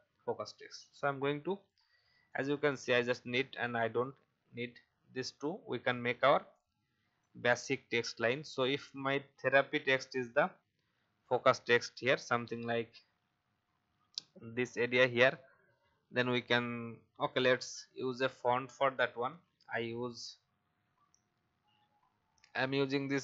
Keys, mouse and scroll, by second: 11.7-15.8 alt+shift+drag, 18.9-19.8 typing.